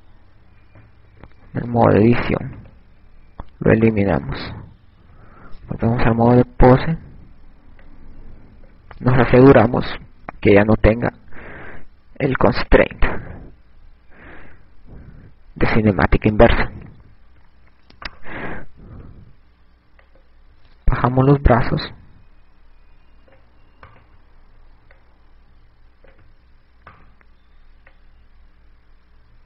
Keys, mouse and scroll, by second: 0.3 Tab, 3.5 Delete, 5.3 right click, 6.4 ctrl+Tab, 8.9 click, 10.4 click, 13.4 click, 17.3 click, 19.9 right click, 20.5 click, 21.4 click, 25.3 right click, 26.3 click, 28.6 right click, 29.3 click.